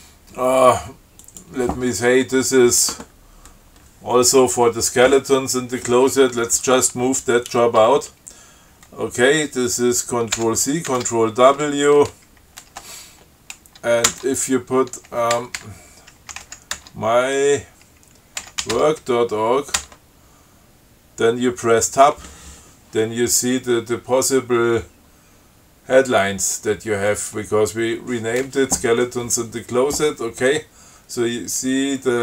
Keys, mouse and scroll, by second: 1.5 click, 10.6 ctrl+c, 11.1 ctrl+w, 14.3 Tab, 15.6-17.1 typing, 18.4-19.4 typing, 20.0 Tab, 27.4 click.